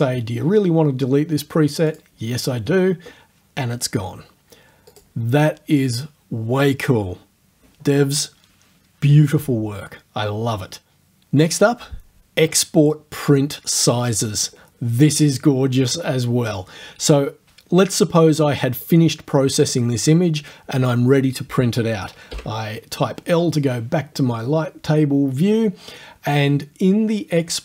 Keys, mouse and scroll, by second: 1.9 click, 4.9 click, 18.9 click, 22.3 l.